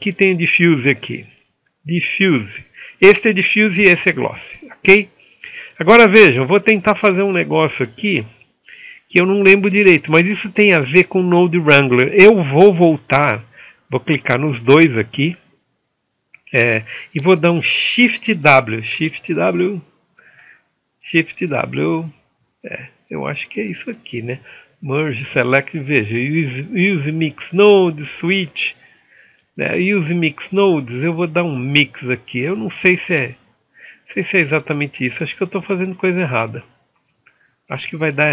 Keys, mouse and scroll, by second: 2.5-4.4 drag, 8.0-38.2 drag.